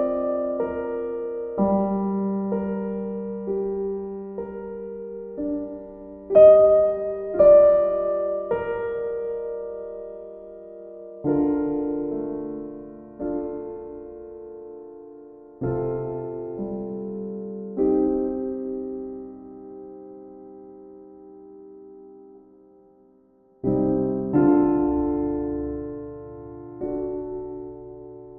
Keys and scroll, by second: 4.5 b, 18.1 e.